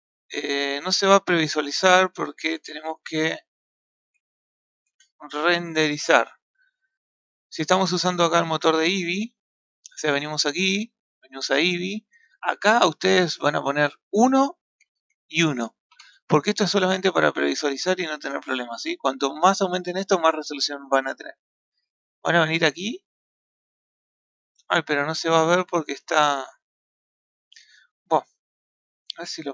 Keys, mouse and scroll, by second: 2.1 click, 2.9-7.5 drag, 8.2-11.2 drag, 13.6-18.4 drag, 29.4 click.